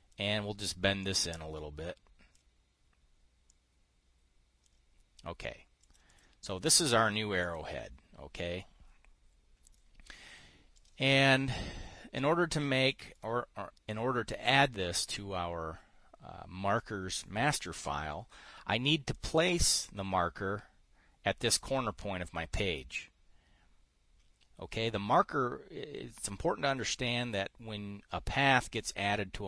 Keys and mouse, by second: 1.5-2.9 drag, 4.0-5.2 drag, 6.3 click, 7.9 click, 10.2 click, 11.2 click, 12.6 click, 13.4 click, 19.6 click.